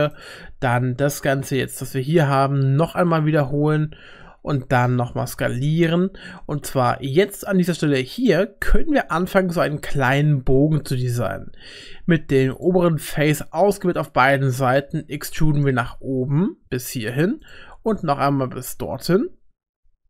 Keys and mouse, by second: 2.7 e, 5.0 s, 10.0 click, 12.5 shift+click, 14.3 middle click, 15.4 e, 17.8 e.